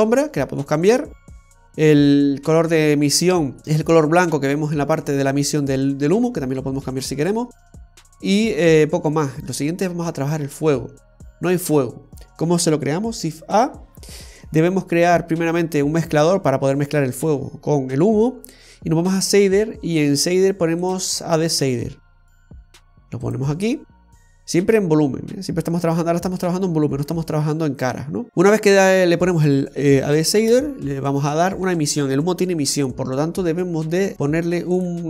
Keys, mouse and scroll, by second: 7.7-8.4 scroll up 1, 8.4-9.4 scroll down 1, 9.4 middle click, 13.4 shift+a, 28.3 middle click, 28.3-29.7 scroll up 3, 30.6 shift+a.